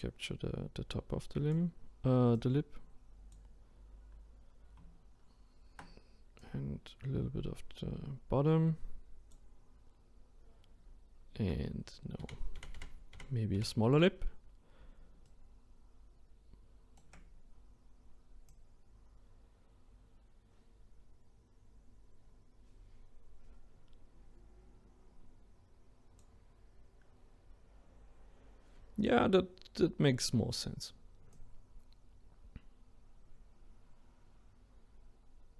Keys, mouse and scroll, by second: 2.3-5.4 drag, 6.4-9.4 drag, 12.2 ctrl+z, 12.6 ctrl+z, 13.1 ctrl+z, 15.3-18.5 shift+right drag, 18.5-21.5 drag, 31.3-34.3 drag.